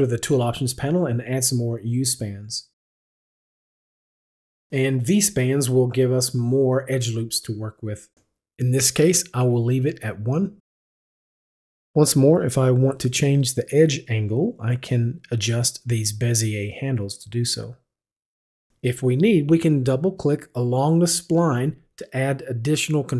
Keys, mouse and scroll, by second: 0.6 click, 4.3 click, 7.4 click, 10.2 click, 14.5 click, 16.8 click, 17.7 click, 20.8 click.